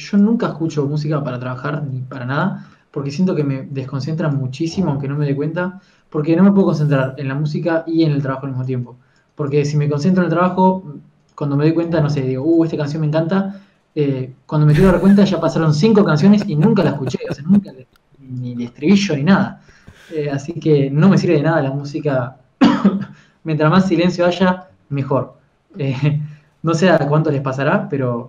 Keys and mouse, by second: 0.0 f, 1.6 click, 2.0 click, 2.4 f, 4.3 KP_3, 4.4 click, 5.1 f, 10.3-11.5 drag, 12.1 f, 18.4 f, 27.9 click.